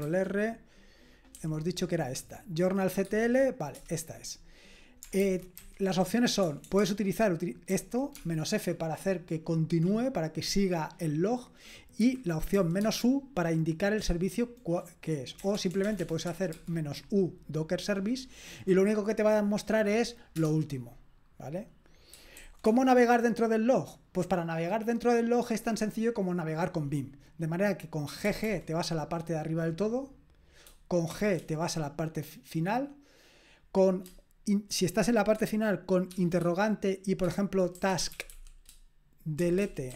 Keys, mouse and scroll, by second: 0.0 ctrl+r, 3.0 Tab, 3.8 Return, 5.2 alt+b, 5.6 alt+b, 6.4-8.1 typing, 12.3-13.0 typing, 15.4-16.5 typing, 22.4 shift+g, 28.3 typing, 31.1 typing, 37.6-39.9 typing.